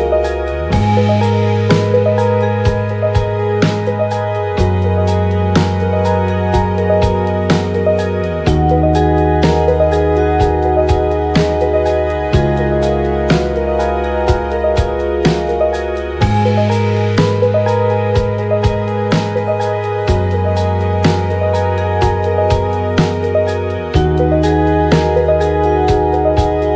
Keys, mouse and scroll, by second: 3.3 ctrl+a, 3.9-13.3 middle drag, 8.8-12.9 right drag, 11.0-12.9 drag, 13.3 click, 14.2-15.6 middle drag, 14.4 click, 15.6-17.3 shift+drag, 17.3-21.4 middle drag, 19.6 KP_3, 21.4 click, 22.1-23.3 middle drag, 22.7 ctrl+a, 22.8 ctrl+a, 22.9 KP_1, 23.3-24.5 drag, 24.5-26.2 shift+middle drag, 25.2 shift+d, 26.2 click.